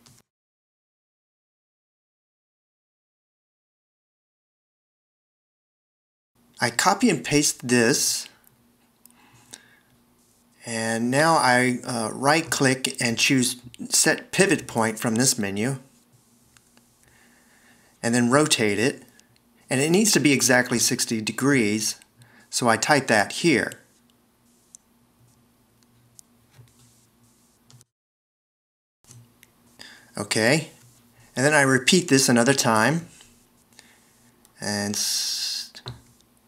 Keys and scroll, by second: 12.9 super+v, 17.0 a, 27.8 BackSpace.